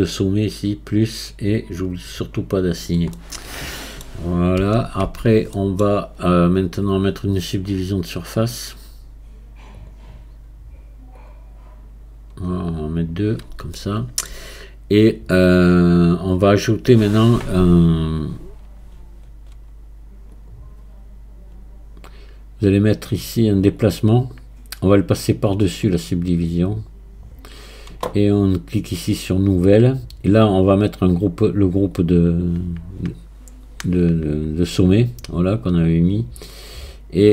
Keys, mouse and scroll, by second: 0.9-3.2 drag, 3.2-4.6 middle drag, 4.6 z, 5.0 Tab, 5.6-8.4 middle drag, 8.4-12.9 drag, 13.0 click, 13.8-16.8 shift+middle drag, 20.4-28.5 drag, 28.9-37.3 drag.